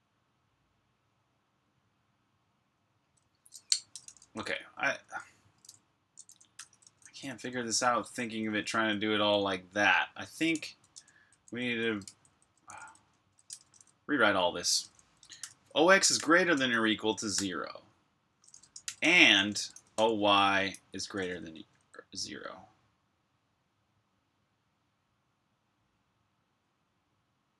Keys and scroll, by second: 2.7-9.0 typing, 15.8-17.3 typing, 18.4-21.7 typing.